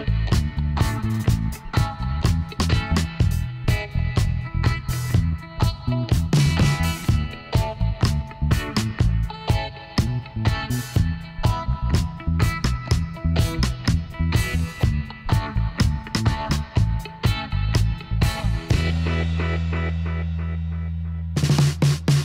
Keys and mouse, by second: 4.1 Tab, 7.2 middle click, 7.4 click, 7.6-9.2 drag, 8.6-11.6 right drag, 10.2 l, 11.4 h, 12.1 middle click, 14.4-16.1 right drag, 14.7 c.